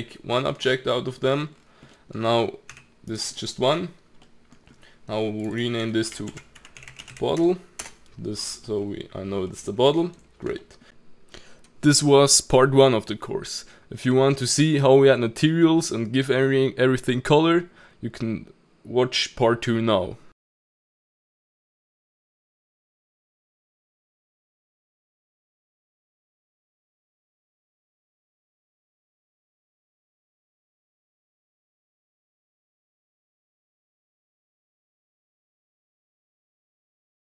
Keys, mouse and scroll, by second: 0.3 middle click, 0.6-1.5 scroll up 5, 0.9 middle drag, 1.5-1.9 scroll down 2, 1.9 middle drag, 2.1-2.7 scroll down 4, 2.7 g, 3.3-4.7 middle drag, 4.7-5.4 scroll up 3, 5.4 click, 5.5-6.9 drag, 6.9 t, 8.6-10.9 middle drag, 11.1 scroll up 2, 11.1-11.7 middle drag, 13.0 click, 13.9-15.0 middle drag, 15.0 scroll, 15.1-15.5 scroll down 1, 15.5 click, 15.8 middle click, 15.9 scroll down 2, 16.2 middle click, 16.7 click, 17.7 click, 19.1 click, 19.7 middle click, 20.7 middle click, 21.1 click, 22.0 click, 23.5 ctrl+z, 23.5 ctrl+z, 24.0 middle click, 24.3-24.6 scroll up 2, 24.6 click, 25.1 middle click, 28.2 click, 28.7 middle click, 29.3 click, 30.2 middle click, 31.2 click, 31.4-32.0 middle drag, 32.1 click, 32.2 middle click, 33.1 middle click, 33.3 scroll up 2, 33.4 middle click, 33.5 scroll down 2, 33.7 click, 33.8 middle click, 34.0 Tab, 34.1 middle click, 34.4 click, 34.7 middle click, 34.9 scroll up 1, 35.0 click, 35.5 ctrl+KP_Add, 35.6 ctrl+KP_Add, 35.7 middle click, 36.2 g, 36.9 middle click, 37.0 g, 37.2 middle click.